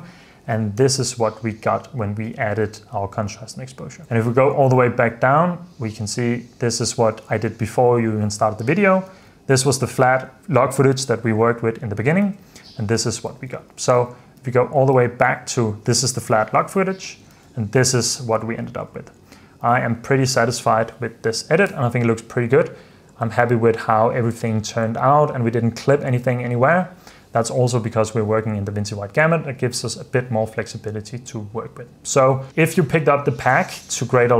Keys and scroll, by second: 0.9 super+d, 2.4 super+f, 4.0 super+d, 7.9 super+f, 9.2 super+d, 12.3 super+d, 13.4 super+f, 14.2 alt+d, 14.5 super+f, 15.1 alt+d, 17.4 alt+d, 18.5 super+f, 19.8 super+s.